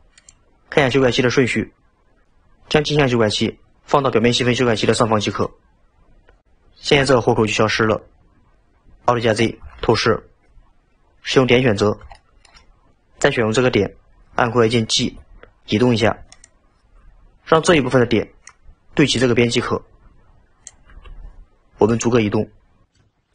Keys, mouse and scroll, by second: 0.2 click, 5.3 click, 9.8 alt+z, 11.8-12.2 scroll up 2, 12.2-12.9 shift+middle drag, 15.0 g, 21.9 click, 23.0 g.